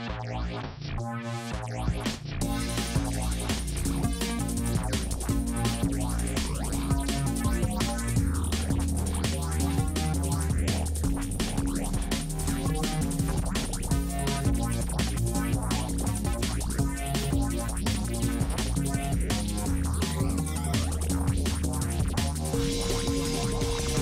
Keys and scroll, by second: 6.5 space.